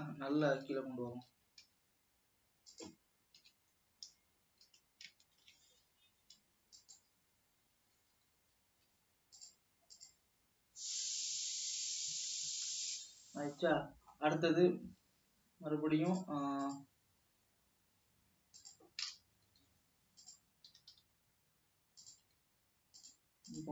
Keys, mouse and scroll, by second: 0.7 ctrl+z, 1.6 ctrl+z, 1.9 s, 3.5 KP_3, 4.7 s, 8.4 e, 13.6 scroll down 2, 13.9-15.5 middle drag, 15.5 e, 18.9 e, 19.7 s, 21.1 g, 22.6 s.